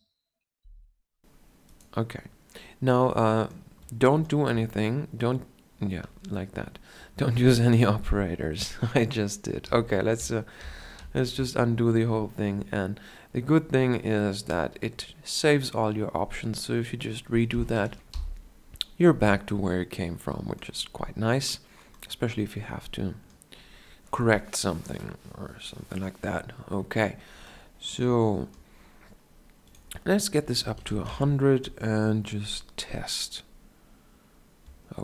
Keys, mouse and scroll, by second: 0.7 g, 4.6 a, 9.8 ctrl+z, 10.3 ctrl+z, 15.1-22.3 drag, 22.3-22.8 scroll down 1, 27.8-28.7 scroll down 1, 31.3 KP_0.